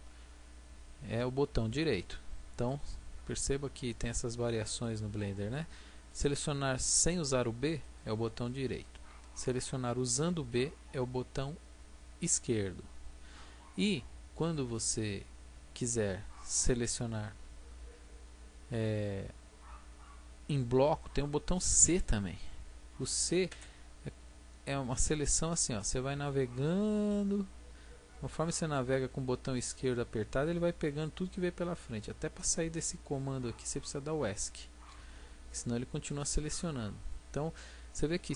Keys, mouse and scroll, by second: 1.7-3.1 right drag, 3.1-12.3 drag, 9.9 b, 23.5 c, 35.5-37.4 drag.